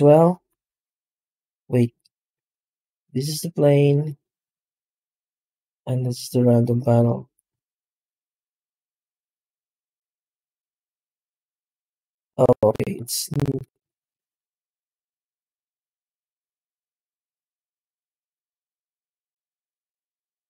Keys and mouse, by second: 2.3 g, 4.0 click, 4.5 g, 5.9 click, 6.2 g, 7.4 z, 9.3 z, 10.7-11.2 middle drag, 12.5 shift+middle drag, 13.6 z, 15.0 right click, 15.4 h, 15.8-16.1 middle drag, 16.2 shift+middle drag, 16.6 z, 19.3-19.8 middle drag.